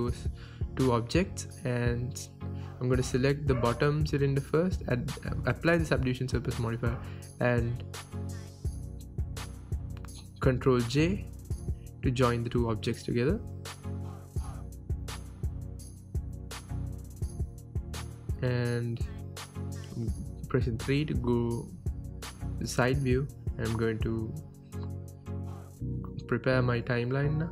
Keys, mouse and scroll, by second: 0.3-0.9 drag, 1.3-3.9 drag, 3.9 ctrl+j, 4.9 ctrl+z, 5.1 click, 6.1 click, 7.2-7.7 scroll up 1, 7.7-9.4 drag, 9.4 ctrl+j, 9.8-12.4 middle drag, 10.1 scroll down 2, 10.5-11.5 scroll up 2, 11.5-11.8 scroll down 2, 11.8-12.4 scroll up 2, 12.4-13.8 right drag, 13.2 ctrl+z, 13.5-13.8 scroll down 2, 13.8-16.9 middle drag, 14.7 scroll down 1, 16.5 KP_1, 16.9 drag, 17.8 g, 19.1 click, 19.3-22.2 middle drag, 22.2-22.9 drag, 22.9 n, 24.2-26.9 drag, 25.7 KP_0, 26.0 KP_Enter, 26.9-27.5 shift+middle drag.